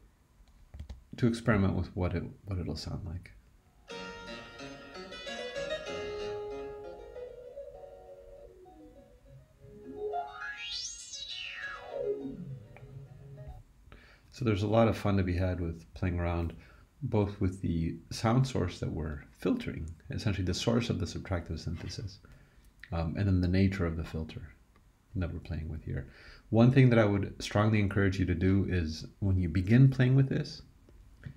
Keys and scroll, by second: 0.8 super+e.